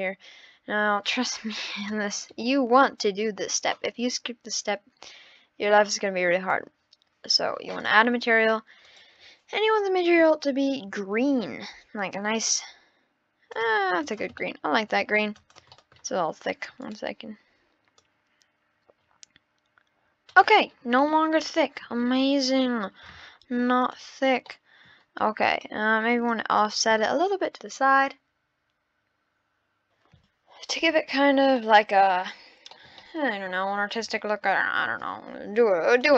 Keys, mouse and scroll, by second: 1.1 click, 2.0-2.4 scroll down 3, 2.4-3.5 middle drag, 3.5 click, 7.8-9.0 drag, 14.0 click, 14.4-14.9 middle drag, 14.9-15.3 scroll down 1, 15.3 click, 15.7-16.8 middle drag, 16.8-18.3 drag, 20.7 scroll down 10, 21.0-21.9 middle drag, 21.9-22.9 scroll up 14, 23.4-23.8 scroll down 7, 23.8 click, 24.5-25.5 middle drag, 25.5 click, 26.3 click, 27.3 click, 31.6-32.3 middle drag, 32.3-32.7 scroll down 1, 32.7-33.5 middle drag, 33.6-34.1 scroll up 6, 34.2-35.9 middle drag, 35.9-36.1 drag.